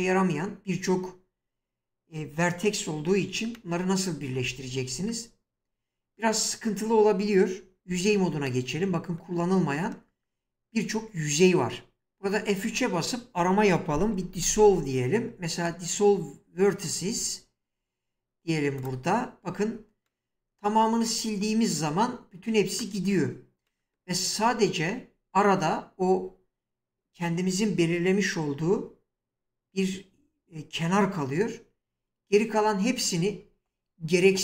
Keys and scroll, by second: 4.2 Tab, 7.9 1, 12.0 F3, 12.7 F3, 14.0-14.5 typing, 33.3 ctrl+z.